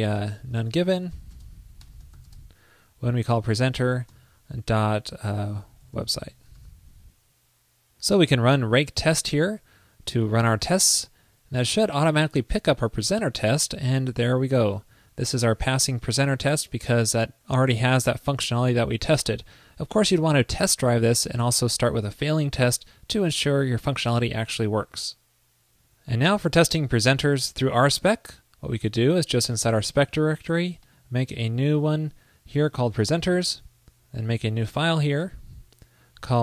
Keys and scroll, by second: 6.6 super+s.